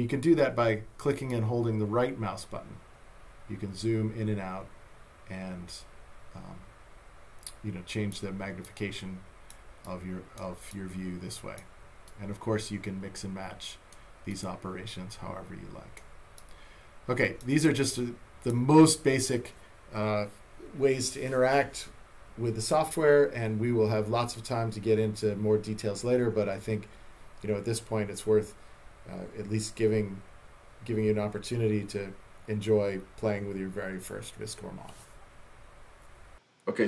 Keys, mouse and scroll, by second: 1.3 right click, 8.7 right click, 9.9 right click, 12.1 click, 14.3 click, 16.4 right click, 17.9 right click.